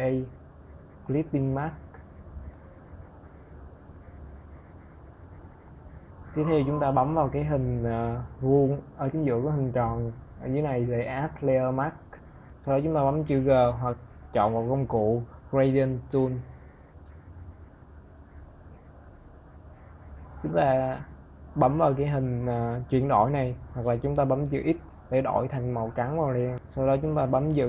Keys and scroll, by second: 23.4 x.